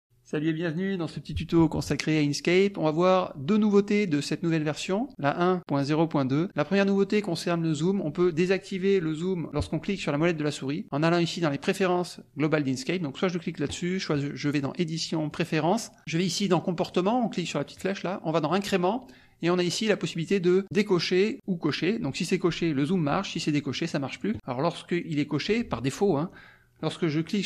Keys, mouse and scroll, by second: 14.4 click, 15.3 click, 16.0 click, 16.8-17.9 drag, 18.5 click, 20.6 click, 21.3 click, 23.7 click, 24.1 click, 24.9 click, 27.0-27.4 middle drag, 27.0-27.4 scroll up 3.